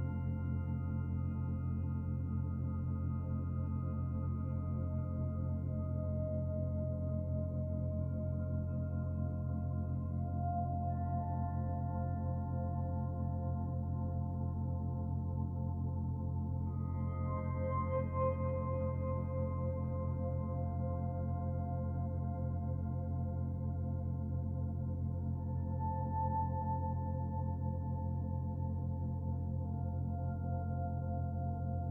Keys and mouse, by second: 1.1 ctrl+r, 12.5 ctrl+r, 22.9 1, 23.8 alt+z, 24.1 click, 24.9 g, 28.8 middle click, 29.7 alt+z, 30.5 alt+z, 31.2 Tab.